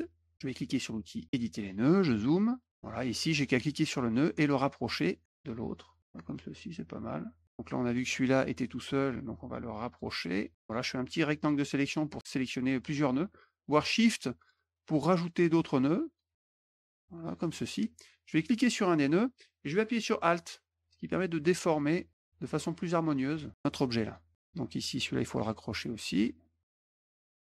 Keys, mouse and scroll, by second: 1.2 click, 1.9 middle click, 1.9-2.4 scroll up 6, 2.1 middle click, 2.3 middle click, 3.9 click, 5.2 click, 6.0-7.4 drag, 9.3 click, 10.5 click, 14.1 shift+click, 14.9 shift+click, 15.8 shift+click, 16.5 shift+click, 16.8 shift+click, 18.6-23.1 drag, 24.0 click, 24.3 middle click, 25.0 click, 26.1 middle click, 26.4 middle click, 26.7 click, 26.9 shift+click, 26.9 shift+click, 27.1 shift+click, 27.2 shift+click, 27.3 shift+click.